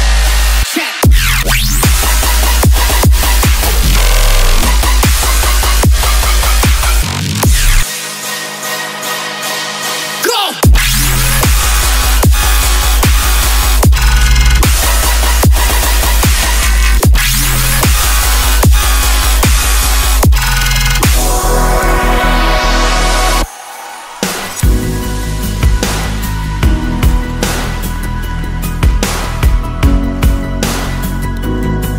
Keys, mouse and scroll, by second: 0.4 middle click, 10.3-13.4 scroll down 3, 16.8 scroll up 1, 31.7 middle click.